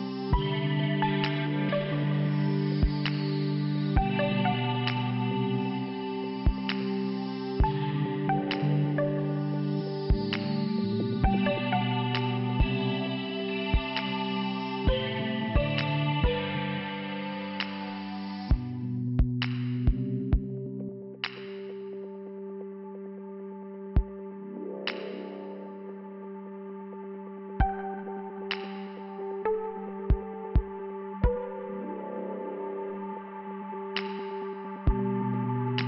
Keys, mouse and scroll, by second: 0.8 click, 2.6 click, 5.1 click, 5.7 click, 8.2 click, 8.7 scroll up 1, 9.5 scroll up 1, 9.8 click, 10.4 click, 12.1 click, 16.8 click, 18.9 click, 20.6 click, 20.7 click, 21.4 click, 23.5 scroll up 2, 23.8-24.3 scroll down 3, 24.9 middle click, 25.7 click, 27.4 click, 27.9 click, 28.6 scroll up 1, 29.5 click.